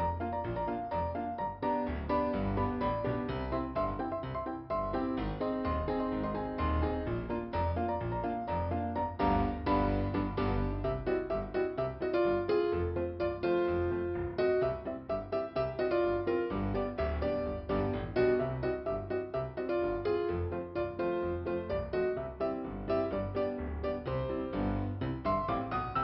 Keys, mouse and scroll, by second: 10.4 click, 10.7 click, 11.2 scroll down 2, 14.3 click, 16.8 alt+i, 17.5 scroll up 2, 19.0 click, 20.0 click, 21.9 click, 24.7 click, 25.3 right click.